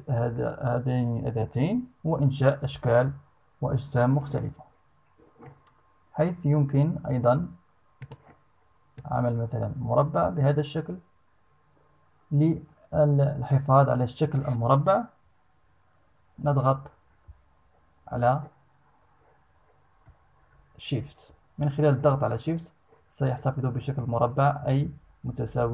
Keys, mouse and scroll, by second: 7.5 click, 8.5-25.7 drag.